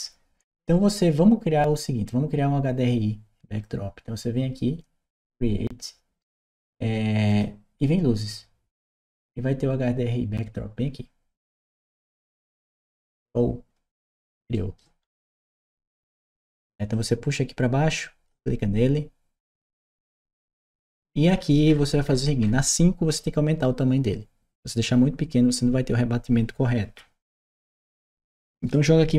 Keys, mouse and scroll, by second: 7.1 click, 12.0 click, 14.3 right click, 14.8 middle click, 14.8-15.3 scroll up 2, 15.3-15.7 scroll up 1, 16.7-18.1 drag, 19.4-20.7 drag, 21.1-24.1 middle drag, 28.1 click.